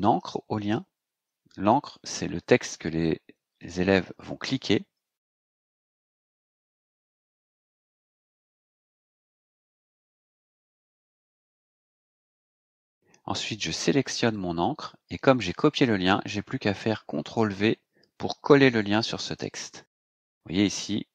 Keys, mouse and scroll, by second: 0.0-1.5 typing, 2.7-5.7 typing, 6.8-12.0 typing, 14.3-15.9 drag, 19.3 ctrl+v.